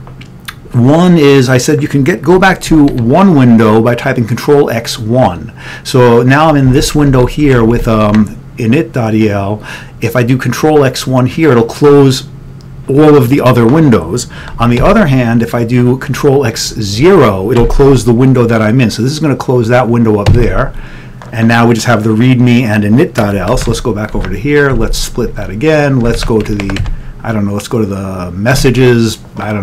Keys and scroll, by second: 2.8 ctrl+x, 3.0 o, 6.8 ctrl+n, 7.0 ctrl+n, 7.3 ctrl+n, 7.8 ctrl+p, 14.7 ctrl+x, 14.9 o, 17.7 ctrl+x, 20.4 0, 23.7 ctrl+x, 24.0 o, 24.2 ctrl+x, 26.1 2.